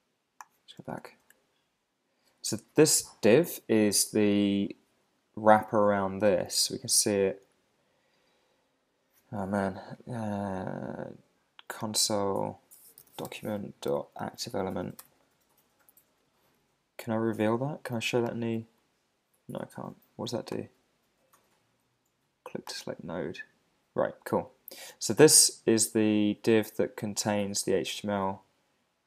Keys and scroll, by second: 1.0 Tab, 13.6 Right, 15.0 Return, 28.1 Right.